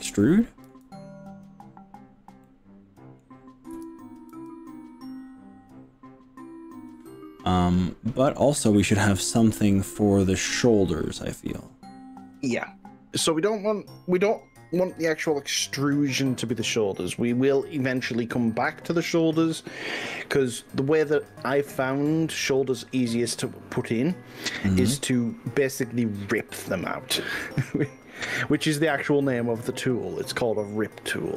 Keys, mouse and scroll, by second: 0.1 click, 0.3 middle click, 2.4 middle click, 3.8 KP_1, 4.3 e, 17.3 click, 23.1 e.